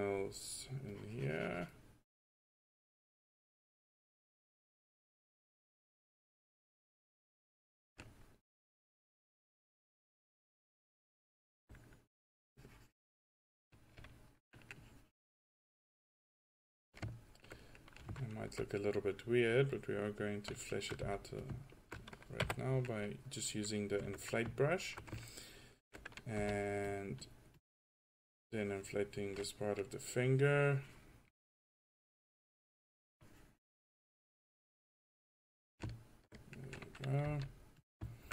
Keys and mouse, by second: 1.0-4.5 drag, 4.7 click, 5.0 middle drag, 5.9-7.8 drag, 9.0-10.4 drag, 10.6 click, 12.2-12.5 drag, 12.9-14.1 drag, 14.8-17.8 drag, 19.9-21.0 drag, 21.0 f, 22.5 1, 26.5 f, 31.5 middle drag, 32.2-32.7 drag, 34.1 drag, 35.5-35.8 drag, 37.3 f.